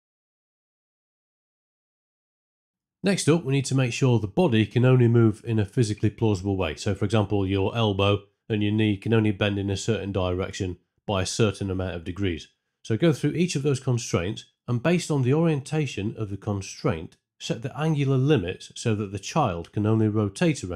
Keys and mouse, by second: 1.8 space, 2.3 shift+Left, 2.6 space, 8.2 alt+click, 9.8 alt+click, 11.2 z, 13.5 middle click, 13.8 alt+click, 14.3 alt+click, 17.7 z, 17.9 click, 18.2 click, 18.4 alt+click, 18.7 alt+click, 18.8 KP_Enter, 18.8-20.3 typing, 19.3 alt+click, 19.7 click, 20.1 click, 20.1 KP_Add, 20.4 ctrl+z.